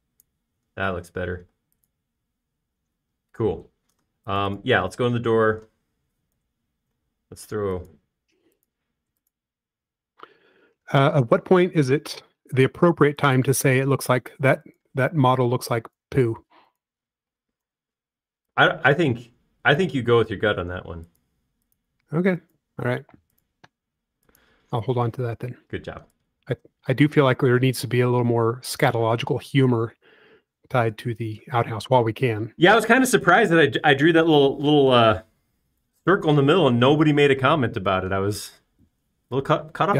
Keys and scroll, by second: 3.3 space, 8.1 c, 14.1 Escape, 16.6 e, 17.7 space, 19.2 s, 22.0 typing, 24.3 q, 24.6 m, 26.5 p, 30.2 space.